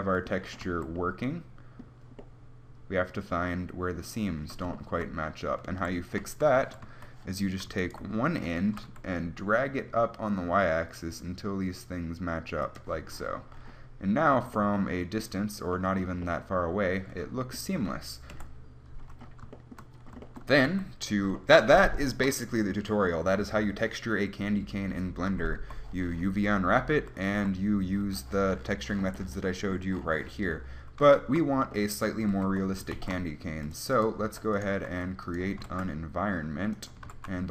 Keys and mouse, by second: 0.9 a, 6.0 a, 6.4-7.1 a, 8.9 g, 13.2-16.7 drag, 18.5 KP_1, 20.9 Tab, 25.8 Tab, 27.5 a, 32.7 Tab, 33.1 shift+a, 34.5 s, 35.2 s, 35.8 g, 37.2 g.